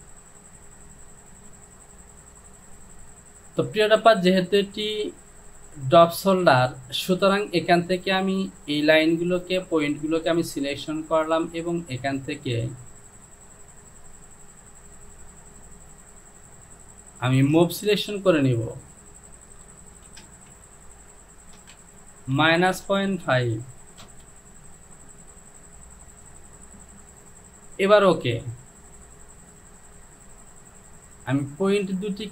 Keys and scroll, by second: 20.1 shift+f, 20.3 shift+f, 20.5 Down, 21.6 KP_0, 21.8 Down, 22.4 KP_Subtract, 22.9 KP_Decimal, 23.3 KP_5, 24.1 Return.